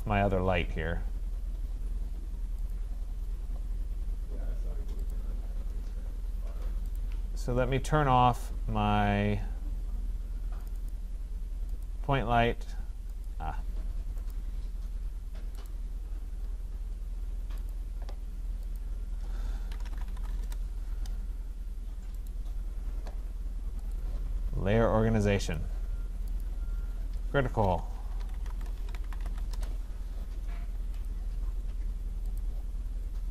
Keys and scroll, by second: 20.4 Return, 29.5 Return.